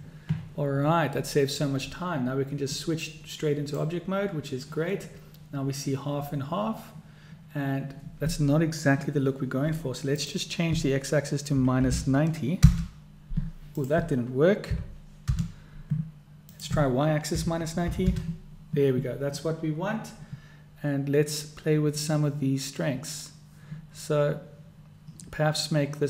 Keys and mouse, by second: 3.1-3.9 drag, 10.2-16.1 drag, 16.7-19.2 drag.